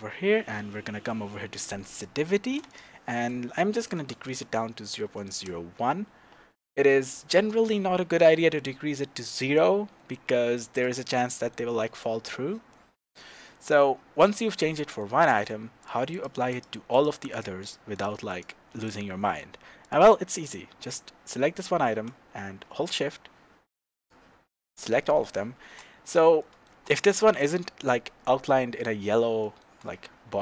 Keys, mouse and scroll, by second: 1.6 click, 2.7-10.1 drag, 5.4 KP_Enter, 10.3-11.2 drag, 10.6 scroll down 2, 11.2-15.8 middle drag, 14.3-15.0 scroll up 2, 15.8 click, 16.1 click, 16.5 click, 16.9 click, 17.3 click, 17.6 click, 17.9 click, 18.3 click, 18.8 click, 19.8 click, 20.2 scroll down 1, 22.9 shift+click, 26.0 scroll up 2, 26.4-30.4 shift+middle drag, 29.8-30.3 scroll up 2, 30.3-30.4 scroll down 2.